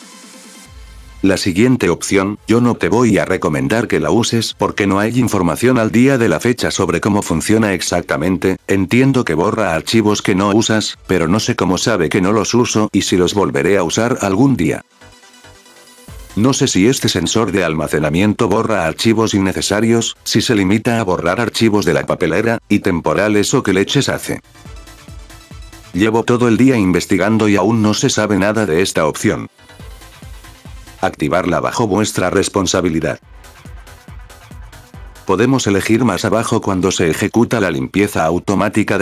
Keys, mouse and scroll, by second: 2.9 scroll down 2, 5.6 click, 6.4 scroll up 2, 33.6 click, 34.9 scroll down 2, 35.0 scroll up 4, 36.9 click.